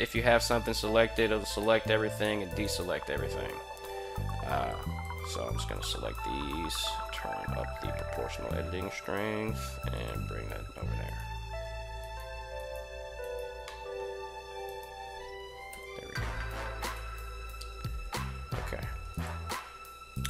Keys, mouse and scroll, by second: 0.2 right click, 1.4 a, 2.0 a, 2.4 a, 2.6 a, 4.0 b, 4.6 drag, 5.5 g, 9.1 Tab, 9.7 click, 10.8 alt+right click, 11.8 alt+right click, 12.4 alt+right click, 13.0 alt+right click, 13.4-13.8 middle drag, 14.4 alt+right click, 15.5 KP_1, 16.6 g, 18.9 click, 19.3 r, 19.9 click.